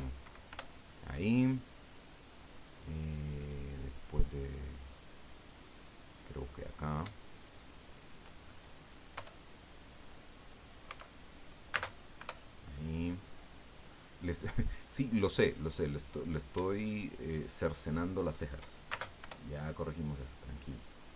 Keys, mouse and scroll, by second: 0.5 Return, 5.7 right click, 7.4 shift+right click, 7.7-10.4 shift+middle drag, 9.1 Return, 11.7 space, 12.1 Return, 15.9 right click, 17.5 shift+right click, 18.9 shift+space, 19.2 shift+Return, 20.5-21.1 drag.